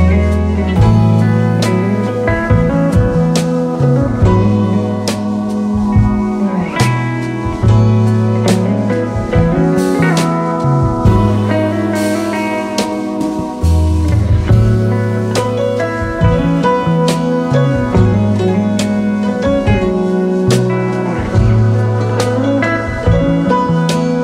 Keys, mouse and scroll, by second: 4.0 ctrl+r, 4.9 alt+scroll down 1, 5.3-6.0 space, 7.8-8.7 alt+scroll down 1, 13.5 alt+scroll up 1, 13.8-14.5 space, 18.5-20.5 typing, 21.3 Return, 21.7 alt+scroll down 1, 22.1 space.